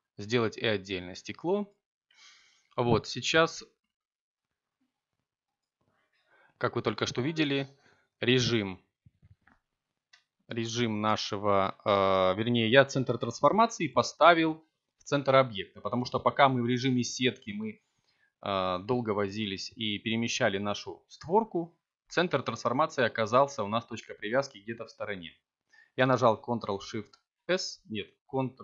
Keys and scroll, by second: 0.2 Tab, 3.1 3, 8.9 s, 21.2 s, 22.6 y.